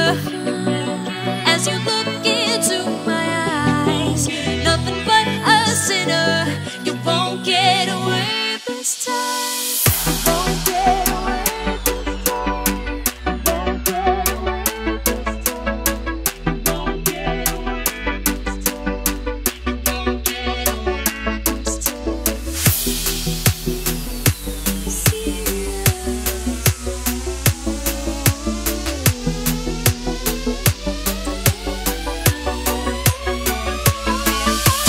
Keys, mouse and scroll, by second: 1.7 click, 2.8-3.9 scroll up 1, 3.9-4.4 scroll down 1, 5.6 click, 6.2 Delete, 9.0-9.8 scroll up 1, 12.0 click, 22.9 Tab, 23.6 click, 24.6 ctrl+c, 24.7 alt+Tab, 25.3 ctrl+v, 25.7 click, 29.2 Right, 30.1 click, 30.9-31.5 scroll up 1, 31.5 click, 31.6 right click, 31.9 click, 32.9 s.